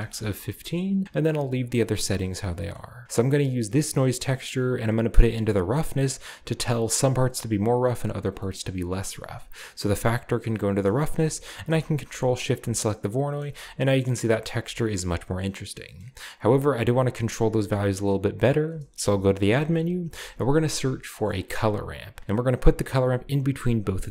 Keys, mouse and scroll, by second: 0.0 Return, 2.1 click, 2.6-3.0 scroll up 2, 3.0 click, 3.0-3.6 scroll down 2, 4.1-8.4 scroll down 2, 4.2 middle click, 9.6-10.7 drag, 11.6 ctrl+shift+click, 12.1 shift+click, 13.4-14.4 shift+middle drag, 13.5-14.4 scroll up 1, 14.4 scroll up 1, 15.0-16.3 shift+scroll down 2, 15.0 shift+middle click, 15.9-16.6 middle drag, 16.3-18.0 drag, 18.7-20.4 typing, 19.3 shift+click, 21.5 click, 23.8 click.